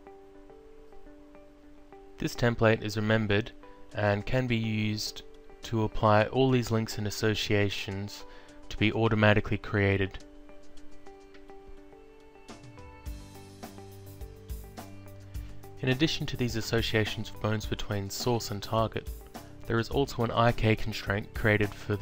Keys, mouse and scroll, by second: 2.4 click, 10.8 alt+click, 12.3 alt+click, 14.3 alt+click.